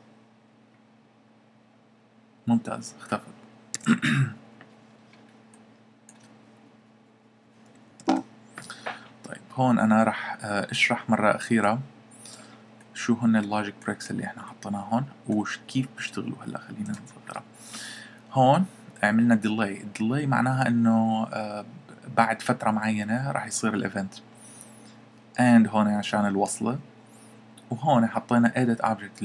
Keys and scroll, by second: 3.7 Escape.